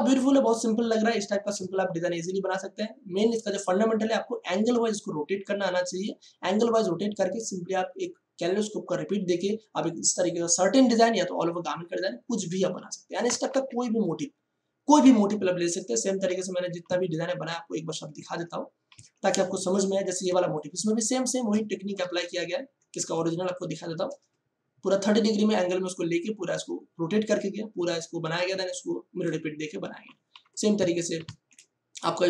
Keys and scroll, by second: 13.5 ctrl+o, 16.2 Escape, 17.5 ctrl+shift+Tab, 20.2 ctrl+space, 22.9 space, 31.2 ctrl+shift+Tab.